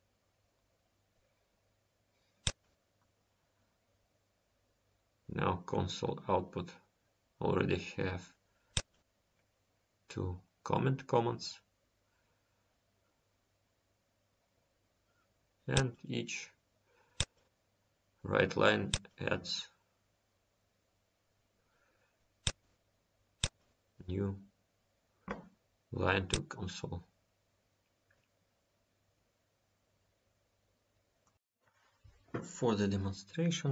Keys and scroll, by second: 10.4 F10.